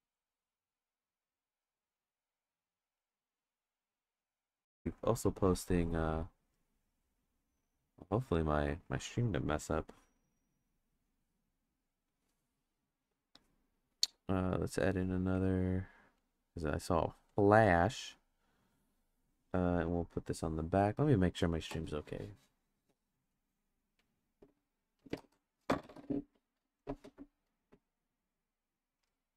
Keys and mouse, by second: 1.5-3.3 drag, 4.2 click, 4.8 click, 10.5 click, 11.6 click, 16.3-17.5 drag, 20.0 click.